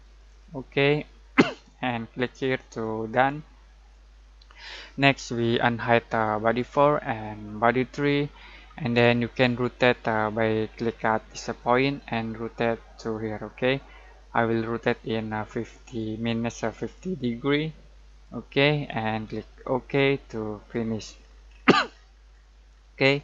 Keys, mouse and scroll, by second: 0.0 click, 3.1 click, 6.4 click, 8.5-8.9 scroll down 1, 8.9-11.3 scroll up 1, 11.6-21.1 drag, 21.1 scroll down 1, 21.4 scroll up 1.